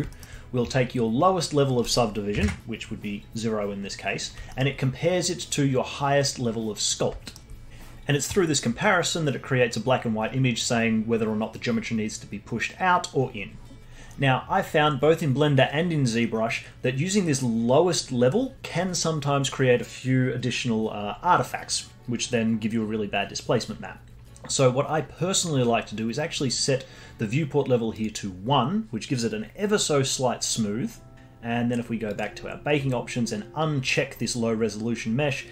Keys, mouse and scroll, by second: 0.1-1.7 alt+middle drag, 1.7-3.2 drag, 3.2-3.8 scroll down 2, 3.8-4.5 scroll up 2, 4.5-7.7 alt+middle drag, 27.9-30.9 drag, 32.1 click, 32.5-33.8 scroll down 4, 33.8 click.